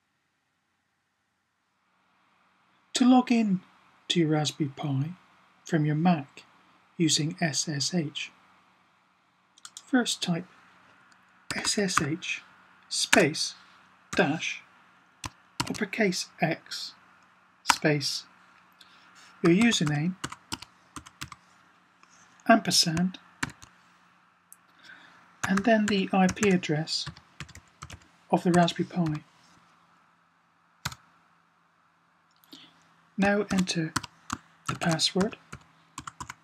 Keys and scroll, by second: 11.1-12.2 typing, 13.8 typing, 15.3 typing, 19.1-21.5 typing, 23.3 typing, 25.3-28.8 typing, 33.1-36.1 typing.